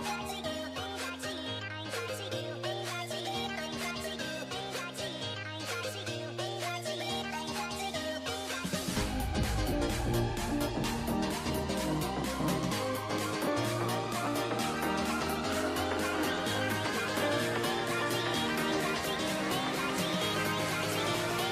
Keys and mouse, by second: 0.1 k, 1.9 a, 2.3 k, 4.0 a, 5.0 k, 6.5 k, 8.9 click, 8.9 a, 10.3 click, 10.4 k, 13.5 a, 13.7 a, 13.8 w, 14.3 a, 16.4 a, 16.5 a, 16.9 l, 19.6-21.2 typing, 20.0 alt+h.